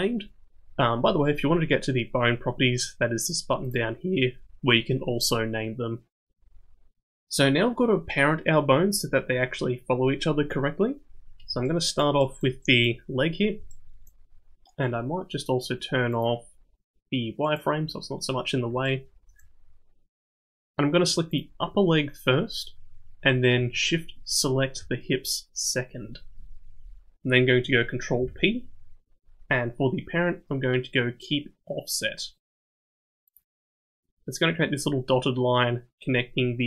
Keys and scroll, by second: 28.2 ctrl+p.